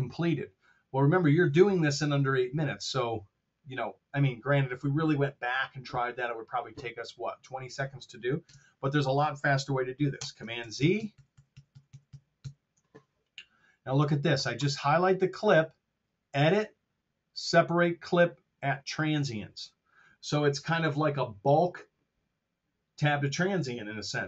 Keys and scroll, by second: 8.4 super+Tab, 10.3 super+z.